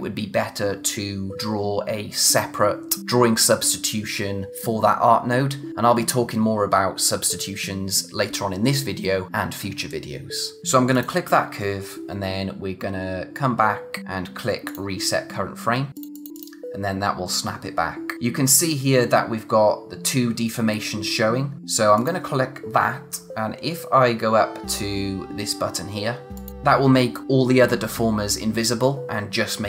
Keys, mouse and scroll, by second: 10.9 click, 14.6 click, 17.5-19.4 scroll up 1, 21.9 click, 26.3 click.